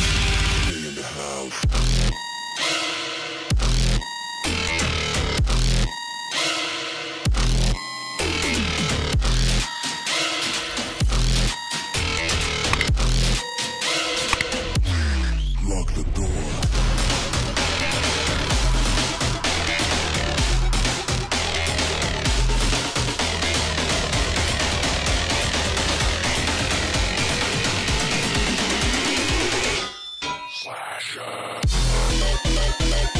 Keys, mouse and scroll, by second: 0.1-0.5 alt+scroll up 1, 1.3 click, 1.5 space, 2.5 alt+scroll up 1, 3.7-4.7 alt+scroll up 1, 4.7 click, 5.2 click, 7.7 scroll up 1, 10.3 scroll down 1, 10.9 click, 11.6 space, 11.8 click, 11.9 space, 13.9 click, 15.8 click, 17.1 click, 18.1 alt+scroll down 1, 18.2 space, 18.2 click, 18.4 space, 19.1 i, 19.5 click, 20.7 click, 22.1 alt+scroll up 1, 22.8 click, 25.1 click, 28.4 click, 28.7 alt+scroll down 1, 29.1 click, 29.3 space, 29.5 click, 30.6 click, 32.3 click.